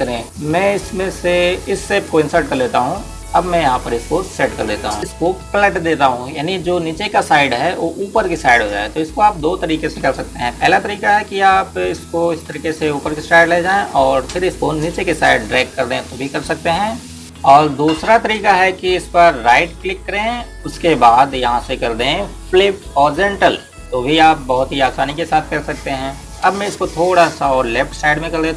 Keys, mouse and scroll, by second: 2.6 click, 12.4 click, 19.2 click, 21.3 right click, 24.2 click.